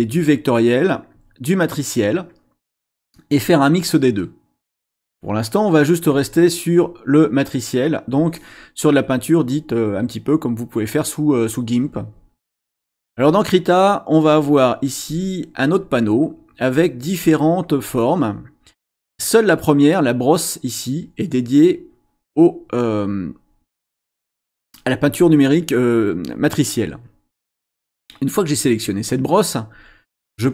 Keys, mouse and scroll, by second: 1.1 click, 3.7 click, 6.1 click, 28.1 click, 30.3 click.